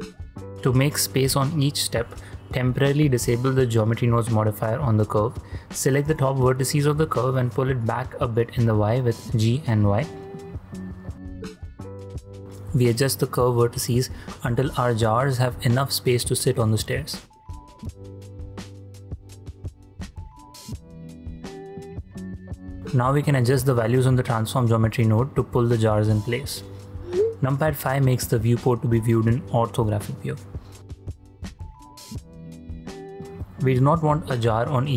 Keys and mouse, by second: 0.0 ctrl+drag, 0.4 shift+click, 0.5 shift+space, 0.8 click, 1.4 Tab, 1.8 shift+click, 2.3 ctrl+click, 2.7 alt+z, 3.1 alt+z, 5.0 1, 5.8 shift+click, 6.5 click, 9.0 click, 10.8 g, 11.1 y, 13.4 click, 13.8 ctrl+click, 14.2 shift+click, 15.1 g, 15.3 y, 19.8 click, 20.2 ctrl+click, 20.9 Tab, 21.2-21.8 middle drag, 22.0 ctrl+middle drag, 22.5 ctrl+middle click, 24.0-26.8 shift+middle drag, 27.2 KP_5, 27.8 shift+middle drag, 28.4 ctrl+middle drag, 28.9 shift+middle click, 29.2 shift+space, 30.0 shift+space, 30.2-30.6 middle drag, 31.2 shift+click, 31.6 shift+drag, 32.1 shift+drag, 33.2 h, 33.8 click, 34.0 h.